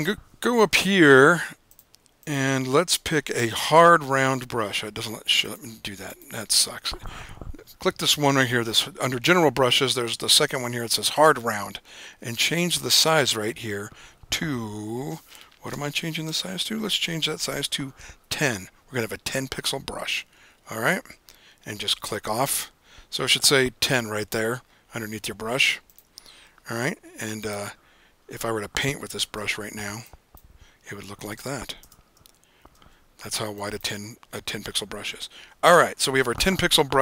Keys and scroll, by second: 17.9-18.9 typing, 29.5 b, 32.9 super+z, 34.6 super+z.